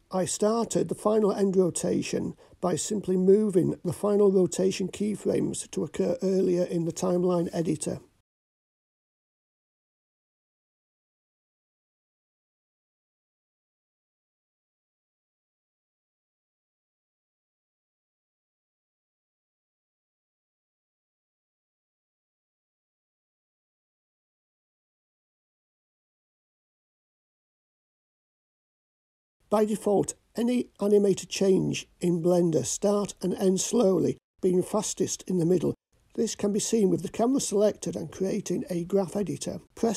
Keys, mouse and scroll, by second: 3.7 click, 4.8 shift+click, 6.3 shift+click, 8.0 g, 11.3-11.8 drag, 12.7-19.9 drag, 21.1 click, 21.6 click, 24.0-28.8 drag, 29.4 click, 32.1-33.6 drag, 35.0-38.0 drag, 39.7 a.